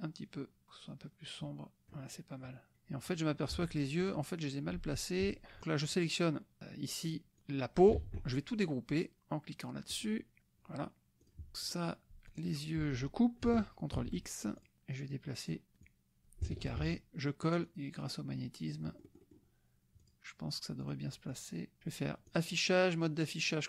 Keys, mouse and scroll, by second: 0.0-2.0 drag, 2.5 click, 3.5 F1, 4.1 click, 7.4 click, 8.0 ctrl+z, 9.9 click, 11.4 click, 11.8 click, 12.5 shift+click, 13.9 ctrl+x, 14.6-15.7 ctrl+drag, 15.8 click, 17.0 ctrl+v, 17.6-19.5 drag, 20.0 click, 21.0 click, 21.3-22.6 drag.